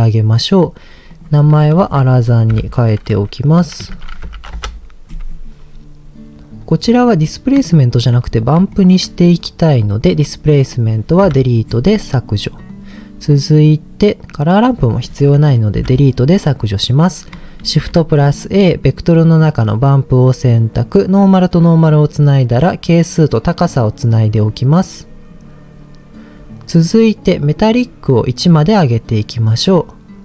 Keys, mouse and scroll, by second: 1.1-4.6 drag, 7.0 scroll up 2, 7.6 scroll up 1, 7.7 shift+middle click, 8.7 shift+middle click, 10.2 click, 11.2 Delete, 12.2 click, 12.6-13.8 drag, 14.2 click, 15.7 Delete, 17.6 shift+a, 21.0 click, 22.8-23.8 drag, 24.1-25.3 drag, 28.4 click.